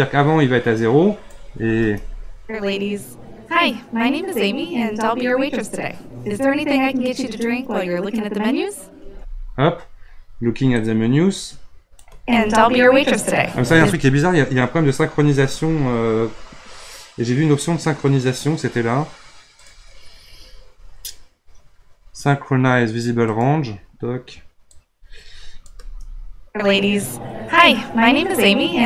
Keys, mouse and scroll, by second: 1.8 space, 9.1 space, 10.8-12.1 drag, 12.1 space, 13.7 space, 16.8 scroll down 2, 17.5 scroll up 2, 19.6-22.7 drag, 24.8-25.7 drag, 25.7 space.